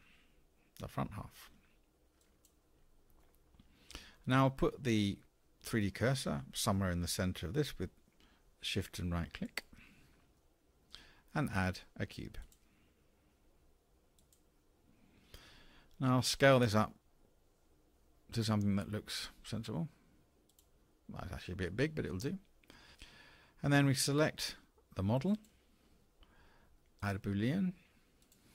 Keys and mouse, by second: 2.2 click, 3.3-4.0 middle drag, 9.5 shift+click, 10.3-11.0 middle drag, 12.4-14.3 drag, 18.9 s.